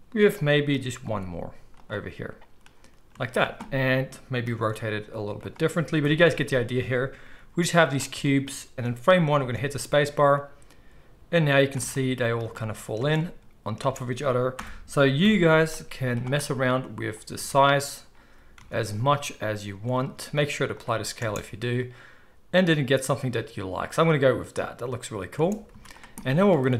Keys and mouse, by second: 1.0 shift+d, 3.0 z, 4.5 r, 6.0 KP_1, 7.1 g, 9.3 space, 11.6 space, 12.9 space, 13.7 space, 14.5 shift+Left, 15.2 KP_1, 15.9 z, 16.8-20.1 drag, 17.3 Tab, 18.6 Tab, 19.4 s, 20.1-26.7 ctrl+middle drag, 20.1 ctrl+a, 21.2 space, 25.3 space, 25.7 z.